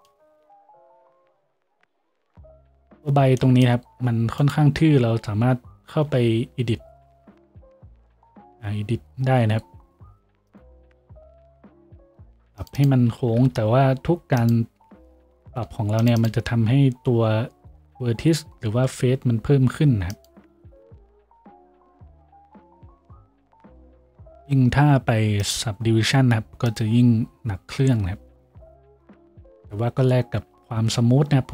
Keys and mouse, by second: 6.0 Tab, 11.4-31.5 ctrl+middle drag, 11.4 a, 11.9 ctrl+r, 13.3 g, 14.3-21.3 drag, 15.0 ctrl+r, 17.1 g, 21.3 Tab.